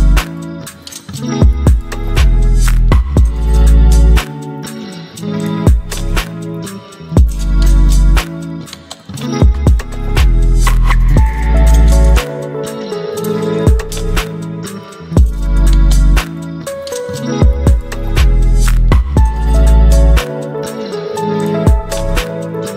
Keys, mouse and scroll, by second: 0.0-2.3 typing, 2.5 Return, 5.0 Return, 5.1-9.8 shift+drag, 10.6 ctrl+0, 12.4 click, 16.7-22.7 drag.